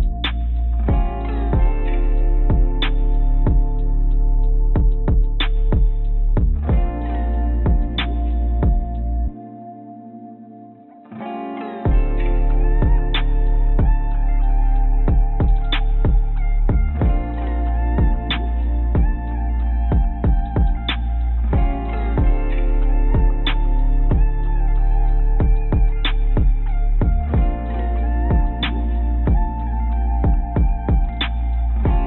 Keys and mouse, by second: 0.7 g, 1.0 click, 1.9 click, 2.4 a, 3.2 g, 6.3 Tab, 6.6-7.6 drag, 12.6 Tab, 13.0 click, 14.1 click, 14.8 s, 22.2 ctrl+z, 23.7 click, 24.3 s, 26.4-27.8 drag, 28.2 click, 29.8 click, 29.9 click, 30.7 click.